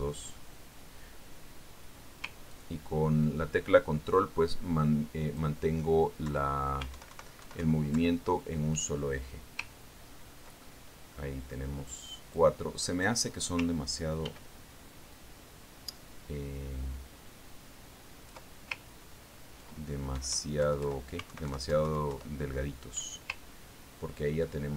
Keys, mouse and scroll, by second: 0.3 ctrl+d, 1.4 middle click, 4.0-7.1 ctrl+drag, 7.8 ctrl+Left, 8.4 alt+Right, 9.4 alt+Left, 11.2-11.8 ctrl+scroll down 2, 12.1-13.1 ctrl+drag, 13.8 click, 15.7 ctrl+d, 16.6-20.1 ctrl+drag, 20.3-20.8 ctrl+scroll up 2, 20.8 ctrl+scroll up 1, 21.6 Right, 22.1 Left, 22.9 alt+Right, 23.2 alt+Left.